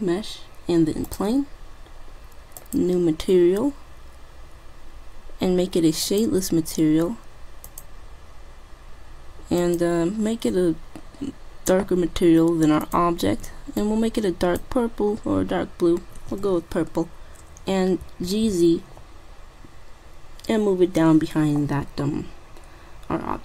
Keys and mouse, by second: 2.6-4.4 drag, 6.2-7.7 drag, 7.8-9.3 drag, 12.9-14.7 drag, 18.1 g.